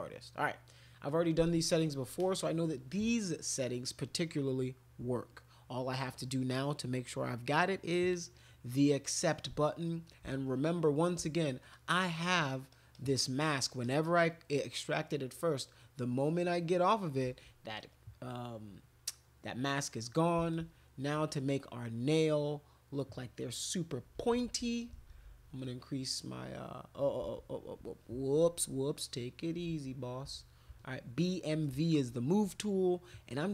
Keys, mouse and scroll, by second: 8.0 click, 9.2 click, 10.4 alt+click, 11.3 ctrl+click, 11.7 ctrl+click, 12.0 ctrl+click, 12.9 ctrl+click, 13.1 ctrl+click, 13.4 ctrl+click, 13.8 ctrl+click, 14.7 ctrl+click, 16.4 ctrl+click, 17.9-20.3 drag, 20.5 alt+click, 22.9 click, 24.1-25.2 typing, 25.6-26.9 drag, 27.2 ctrl+z, 29.6 b, 30.2 m, 30.7 v.